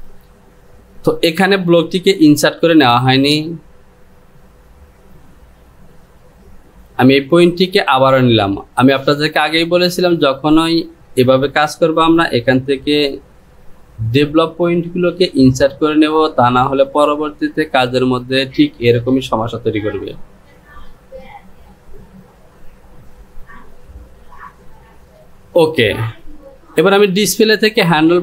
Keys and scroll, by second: 2.6 Delete.